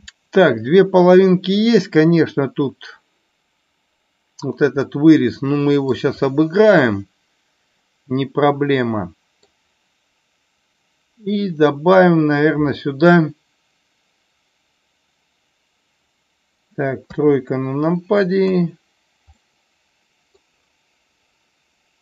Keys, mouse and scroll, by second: 4.7-5.8 middle drag, 6.3-9.3 middle drag, 17.1 KP_3, 18.3 KP_1, 19.3-20.3 middle drag.